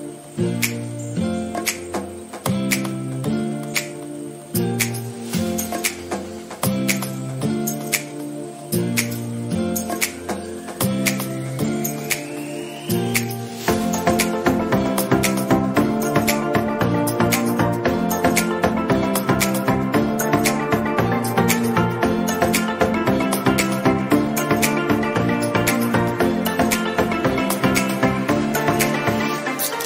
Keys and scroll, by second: 3.6 ctrl+d.